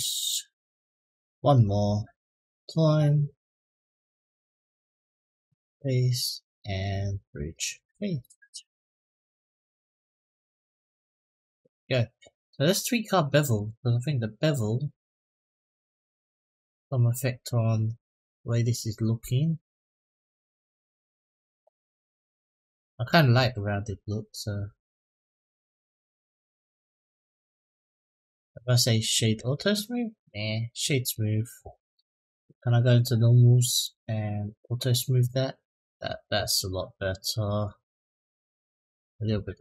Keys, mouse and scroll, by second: 0.5 middle click, 1.8 click, 2.2 middle click, 3.0 shift+click, 3.5-5.1 right drag, 5.4 middle click, 6.0 click, 6.4 middle click, 7.2 shift+click, 8.0-9.2 right drag, 9.5 click, 9.9 middle click, 10.7 Tab, 11.1-11.7 middle drag, 13.3 click, 15.0 click, 16.7-21.1 drag, 21.7-22.6 middle drag, 24.3-27.1 drag, 27.8-29.2 right drag, 29.9 right click, 32.3 click, 33.6 click, 35.0 click, 37.1 click, 37.5-38.6 middle drag, 39.1 middle click.